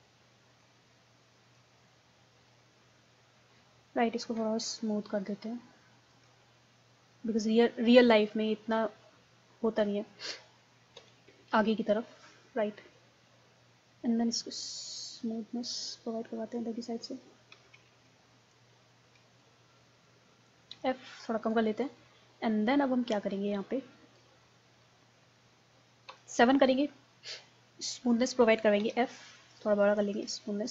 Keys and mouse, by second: 1.8 click, 2.3 middle click, 4.9-6.8 drag, 7.2-11.0 middle drag, 11.0 KP_1, 14.8-17.4 drag, 17.4 middle click, 18.0 ctrl+z, 19.4-20.6 drag, 20.8 f, 21.6-23.1 drag, 23.6-25.5 drag, 26.1 KP_7, 28.8 f.